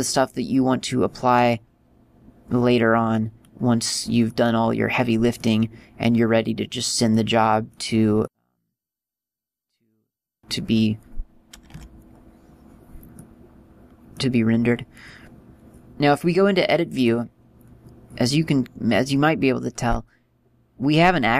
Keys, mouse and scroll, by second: 3.5-3.9 scroll up 3, 4.4 middle click, 5.6 middle click, 7.3 middle click, 8.3 middle click, 11.1 right click, 11.9 Tab, 13.3 middle click, 20.0 middle click.